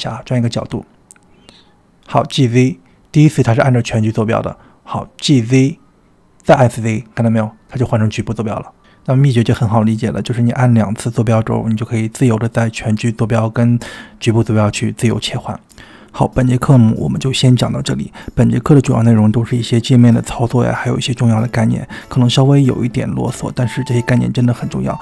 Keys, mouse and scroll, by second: 0.2 r, 2.3 g, 5.4 g, 15.6-16.6 middle drag, 17.4 click, 20.2 r.